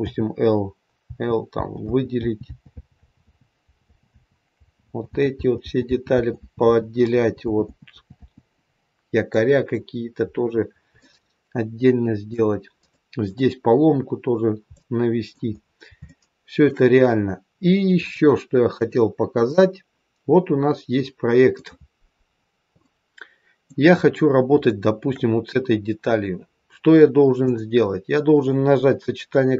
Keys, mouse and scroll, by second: 0.0-5.4 typing, 6.7-8.2 typing, 8.8-9.2 scroll down 2, 9.2 middle click, 10.9 shift+middle click, 12.8 middle click, 14.7 middle click, 15.5 scroll down 2, 15.9 shift+middle click, 16.2 shift+middle click, 17.9 click, 19.3-19.7 scroll down 1, 19.7 middle click, 22.3-22.7 scroll up 3, 22.7 middle click, 24.6 shift+middle click, 27.3 click.